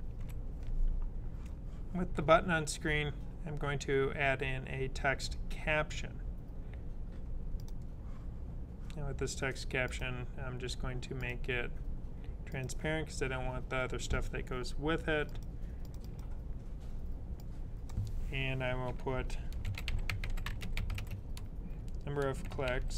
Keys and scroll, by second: 19.2-22.9 typing.